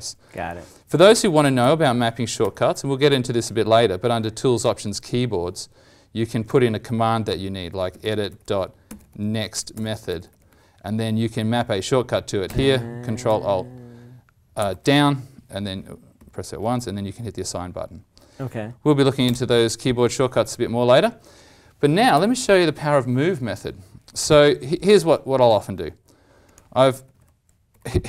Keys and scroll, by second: 1.5 alt+t, 14.6 ctrl+alt+Down, 14.6 ctrl+alt+Up, 16.1 ctrl+alt+Down.